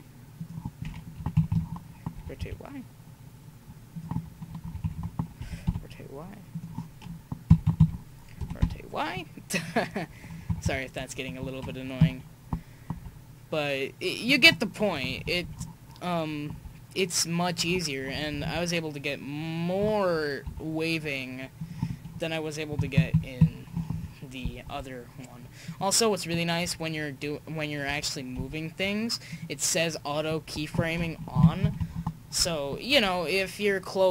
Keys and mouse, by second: 1.1 Right, 1.3 Right, 4.6 Right, 4.8 Right, 7.5 Right, 7.6 Right, 8.4 r, 10.5 Right, 10.6 Right, 11.7 Right, 11.9 Right, 12.9 r, 15.1 Right, 15.3 Right, 16.5 r, 18.1 Right, 18.3 Right, 20.4 r, 22.7 Right, 22.9 Right, 23.9 Left, 24.6 r, 28.4 g, 31.4 Right, 31.6 Right, 32.9 r.